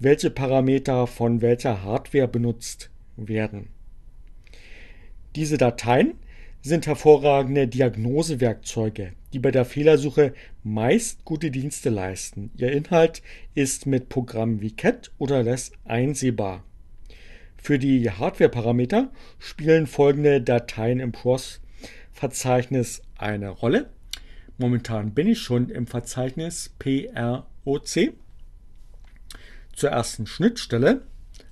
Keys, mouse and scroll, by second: 29.3-30.2 typing.